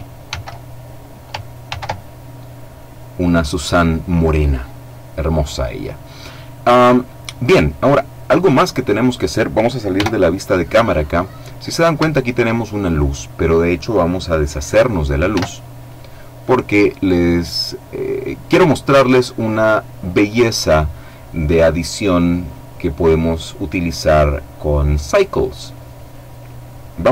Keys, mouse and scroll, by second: 1.3 ctrl+v, 7.7-8.3 scroll down 2, 8.4-8.9 scroll down 2, 8.9-9.4 scroll up 2, 9.5 KP_0, 10.4 middle click, 10.7-11.5 scroll up 1, 11.5-11.9 shift+scroll up 1, 11.9 shift+middle click, 12.3 shift+right click, 12.9 middle click, 14.9 x, 15.5 click.